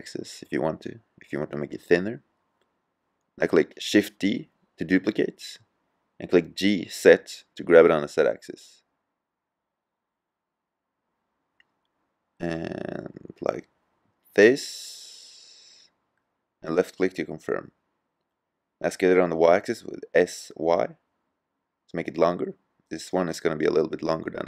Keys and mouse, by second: 1.7-3.6 middle drag, 4.7 shift+d, 17.6-19.2 drag, 19.2 s, 23.4-24.4 drag.